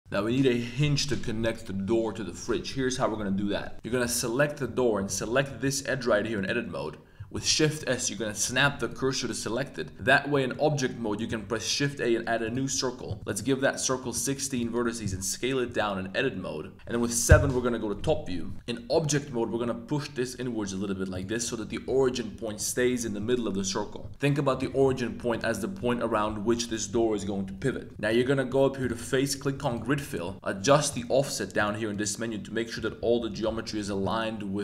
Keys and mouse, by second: 3.7 click, 4.0 Tab, 4.2 click, 4.8 2, 5.0 click, 5.3 middle click, 5.6 g, 6.3 click, 7.3 shift+s, 10.3 Tab, 10.3 middle drag, 11.2 shift+a, 13.3-14.5 drag, 14.8 Tab, 15.0 1, 15.6 s, 16.7 KP_7, 17.3 KP_7, 18.5 Tab, 18.9 g, 19.1 x, 21.1 click, 24.6 g, 24.8 x, 25.3 shift+click, 27.9 s, 28.8 click, 31.9 click.